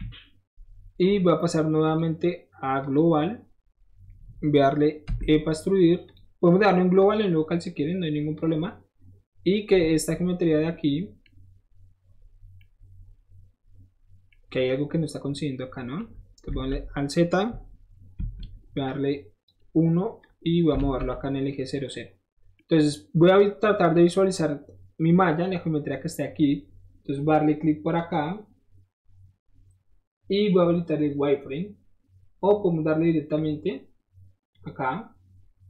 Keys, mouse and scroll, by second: 0.8 middle click, 1.9 click, 2.8 click, 6.0 click, 6.0 right click, 7.0-7.6 drag, 7.0-7.6 right drag, 8.3-9.5 drag, 8.3-9.5 right drag, 9.7-10.8 middle drag, 10.8 middle click, 11.2-12.4 middle drag, 12.4 scroll down 1, 12.5 middle click, 14.3-16.7 middle drag, 16.6 alt+z, 18.8 click, 20.2 click, 20.8 alt+z, 21.1 middle click, 22.4 middle click, 22.4 middle click, 23.4 middle click, 23.9-28.0 middle drag, 28.0 click, 28.1-32.5 middle drag, 33.4 click, 34.5 click.